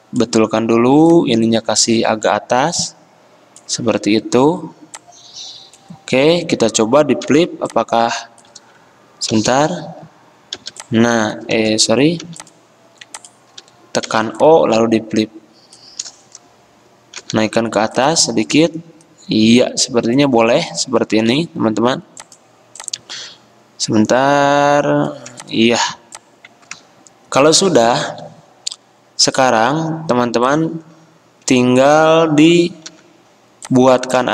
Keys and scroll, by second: 7.4 o, 8.8 ctrl+z, 9.5 v, 10.7 o, 11.7 ctrl+z, 12.4 v, 14.2 o, 17.4 v, 21.4 a, 25.5 v, 28.2 a, 33.0 v.